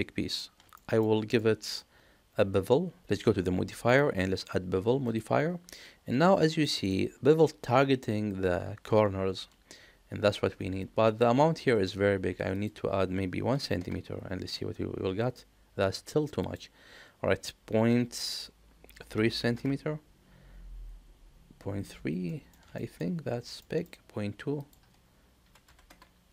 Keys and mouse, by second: 0.7 shift+middle drag, 1.4 middle click, 3.8-5.2 drag, 6.6 middle click, 12.5 click, 16.3-20.8 drag, 22.2 middle click, 22.7 shift+middle click, 23.6 middle click, 24.5-26.3 drag.